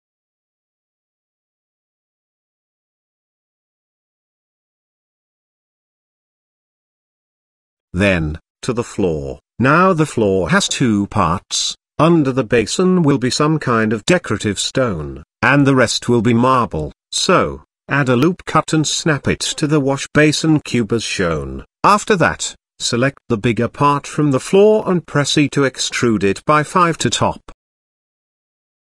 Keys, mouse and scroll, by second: 0.3 shift+middle click, 0.9-3.4 middle drag, 3.5 shift+middle click, 4.5 Tab, 5.5 ctrl+s, 6.0 middle click, 6.4 KP_0, 10.4 click, 10.8 middle click, 11.5-11.9 shift+middle drag, 12.3 middle click, 12.8 click, 12.9 Tab, 13.3 click, 14.2 shift+middle click, 14.8 middle click, 15.8 ctrl+r, 18.4 g, 20.6 middle click, 21.7 shift+middle click, 22.3-23.4 middle drag, 24.3 shift+scroll up 1, 25.8 Tab, 26.1 Tab, 27.1 click, 27.5 click, 28.2 middle click.